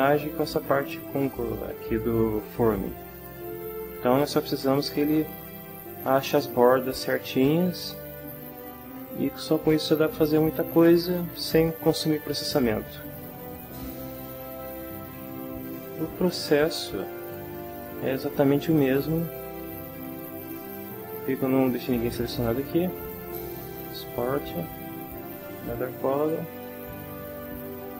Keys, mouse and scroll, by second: 5.4-6.9 middle drag, 7.9-10.8 middle drag, 16.1 a, 16.4-17.4 ctrl+middle drag, 18.7 ctrl+middle click, 20.4 click, 22.8 click, 26.1 click.